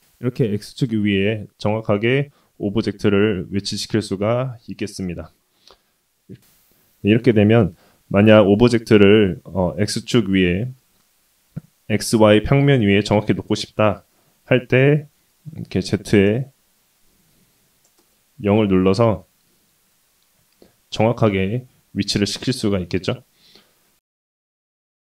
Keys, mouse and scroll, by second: 0.5 KP_1, 0.9-1.2 scroll up 1, 1.2-1.8 scroll down 2, 1.8 shift+middle click, 2.4-2.9 scroll up 3, 10.8 middle click, 12.5 middle click, 14.1 KP_1, 15.6 click, 16.8 click, 17.4 click, 18.7-19.9 middle drag, 20.1 middle click, 20.5 middle click, 21.6 shift+middle click, 22.6-24.1 scroll down 1, 24.4 KP_1.